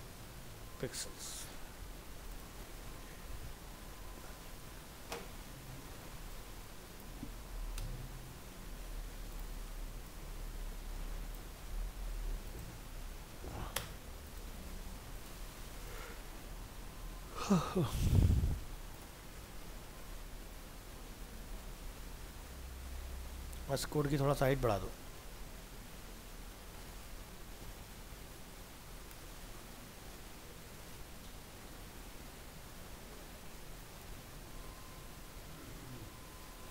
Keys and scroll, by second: 0.4 ctrl+s, 11.6 ctrl+x, 13.1 ctrl+v, 16.3 ctrl+s, 23.8 alt+Tab, 35.6 ctrl+s, 36.0 alt+Tab.